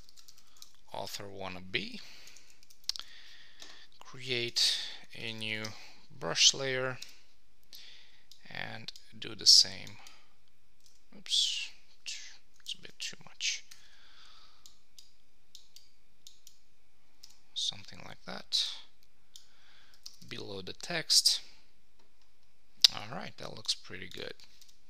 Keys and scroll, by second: 2.6 super+Return, 4.5 shift+super+n, 5.6 Return, 12.8 alt+super+z, 20.0 Return.